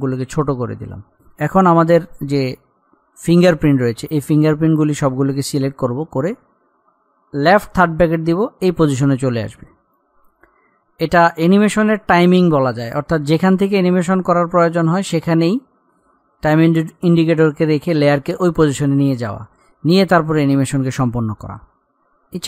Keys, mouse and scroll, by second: 0.0-0.3 scroll up 1, 3.4 click, 4.6 scroll up 1, 5.6 click, 8.0 [, 9.6-12.6 drag, 21.0 click, 21.7 scroll up 1, 22.2-22.4 drag.